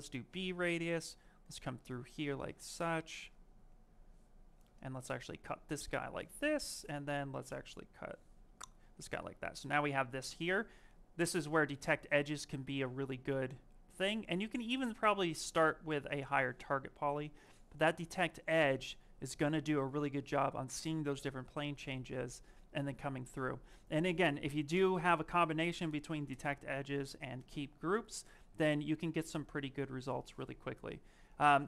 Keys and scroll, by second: 0.8 s, 9.8 shift+f.